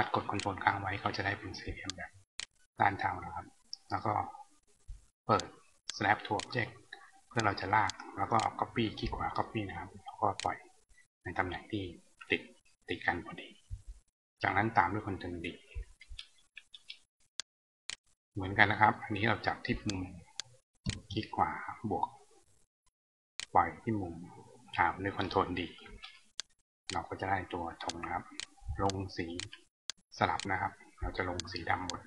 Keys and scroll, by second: 14.8 ctrl+d, 23.8 ctrl+d.